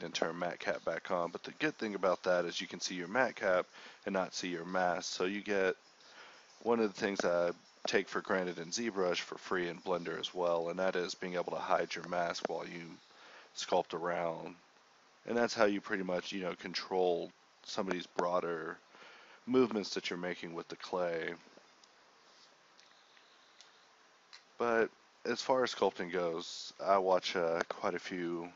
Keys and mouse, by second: 1.9-3.7 drag, 3.7 ctrl+z, 4.5-5.8 drag, 6.4-7.9 drag, 9.2 click, 9.7-10.2 ], 10.2 drag, 10.5 ], 12.0-13.4 drag, 14.0 middle click, 22.2-23.6 drag, 24.6 click, 25.9-26.2 drag, 28.0-28.5 middle drag.